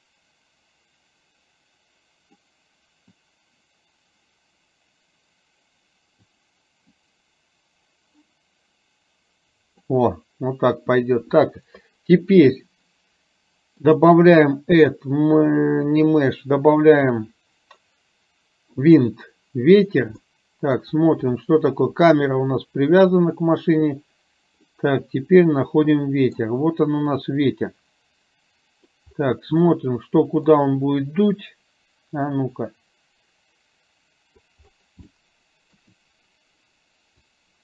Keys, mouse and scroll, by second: 3.3-6.5 drag, 6.9-10.0 drag, 10.2-10.8 scroll down 1, 14.0-18.2 drag, 19.1 drag, 20.4-20.8 middle drag, 24.8-26.4 middle drag, 27.4-29.0 drag, 29.8 middle click, 32.3 click, 32.5-34.5 drag, 35.1 shift+middle click, 37.4-37.6 drag.